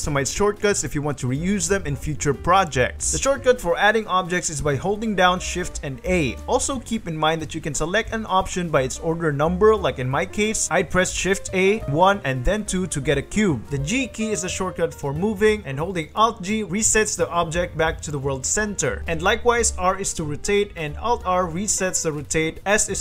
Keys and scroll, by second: 3.1 shift+a, 6.0 shift+a, 7.2 shift+a, 10.4 shift+d, 13.0 shift+x, 14.6 g, 16.7 alt+g, 17.8 alt+g, 19.0 alt+g, 19.4 r, 20.9 alt+r, 22.1 alt+r, 22.8 s.